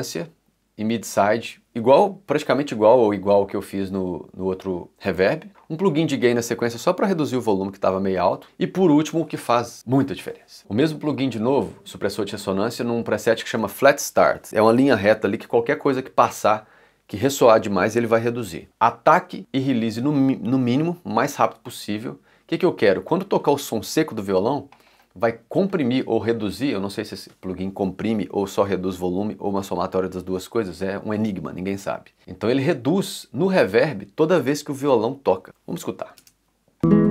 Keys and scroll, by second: 5.5 5, 8.4 6, 36.2 space.